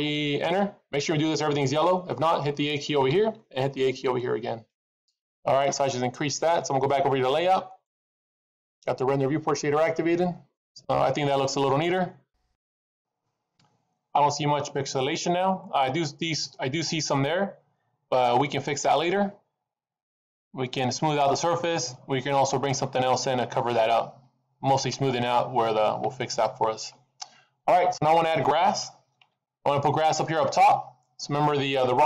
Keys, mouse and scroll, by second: 7.9 click, 10.0 scroll down 2, 10.5 middle click, 12.0-12.3 scroll up 2, 12.8 middle click, 17.1 middle click.